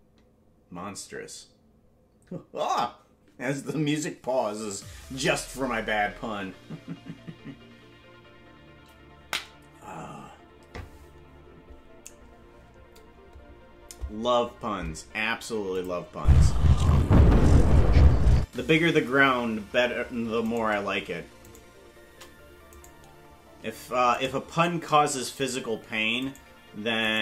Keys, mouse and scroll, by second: 8.8 typing, 15.8 click, 16.1 space, 18.4 space, 20.7 right click, 21.6 shift+right click, 22.8 right click, 24.5 shift+right click, 25.5 right click.